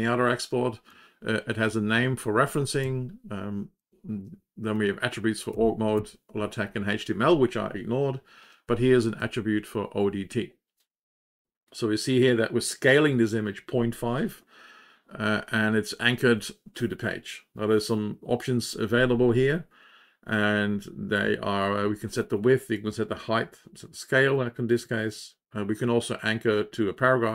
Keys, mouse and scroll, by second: 0.8 Down, 1.6 End, 2.8 Down, 3.7 Home, 5.5 Down, 5.9 Down, 9.1 Down.